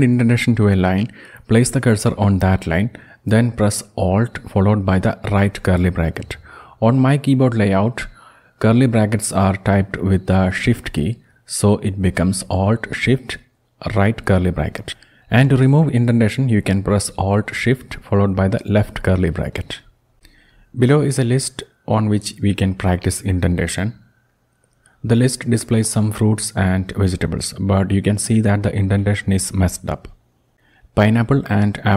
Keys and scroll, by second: 4.3 alt+shift+}, 17.9 alt+shift+{, 31.7 ctrl+Down.